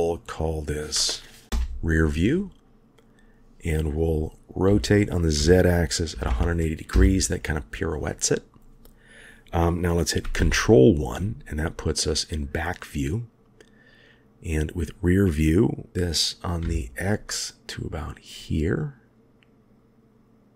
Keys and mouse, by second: 0.1 click, 1.4 click, 4.7 r, 10.3 ctrl+KP_1, 14.6-15.9 drag, 15.9 g.